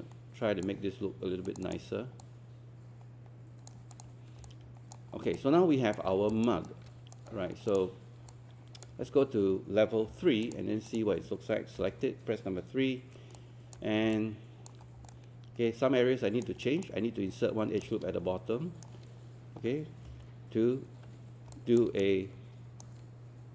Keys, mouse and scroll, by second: 5.2 scroll down 1, 5.4 alt+click, 6.1 scroll up 1, 6.3 alt+click, 6.7 right click, 7.7 click, 10.1 3, 10.5 click, 11.8 click, 13.4 alt+click, 13.9 scroll up 1, 14.2-16.5 alt+drag, 16.7 alt+click, 17.9 right click, 20.1 ctrl+2, 21.5 alt+click, 22.0 shift+right click.